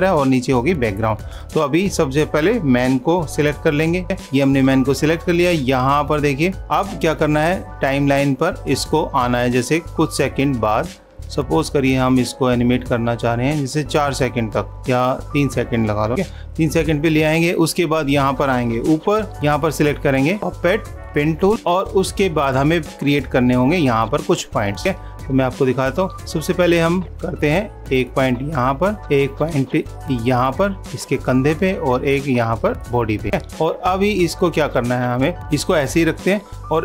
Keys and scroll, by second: 17.3 super+=.